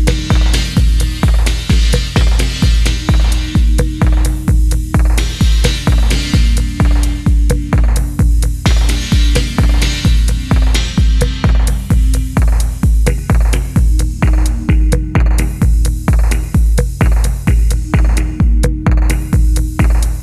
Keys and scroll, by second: 3.0 ctrl+c, 6.2 g, 8.2 g, 10.0 g, 11.2 g, 14.1-14.5 typing, 16.2-18.0 typing, 18.6 alt+a, 18.8 Tab, 19.4 n, 19.5 n.